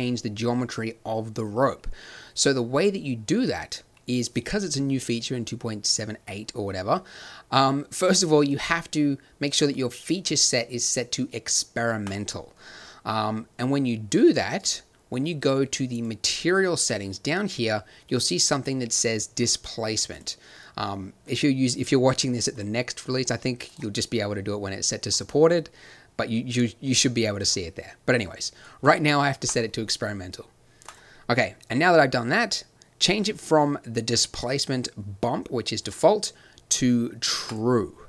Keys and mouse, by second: 8.4-12.0 drag, 15.8-21.6 drag, 25.1-27.0 drag, 27.3-30.7 drag, 30.8 click, 31.3 click.